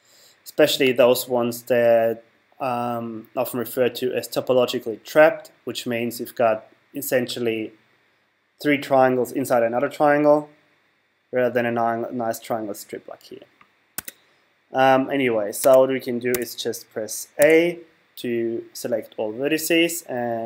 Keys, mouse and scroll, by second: 0.9-2.6 right drag, 14.0 Tab, 15.6 Tab, 16.3 a, 17.4 a.